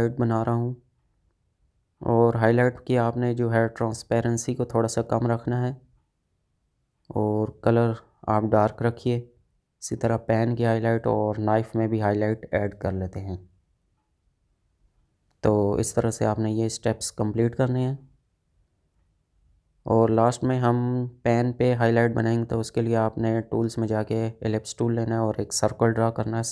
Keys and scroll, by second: 3.6 space, 7.6 space, 10.8 space, 15.9 space, 18.8 space.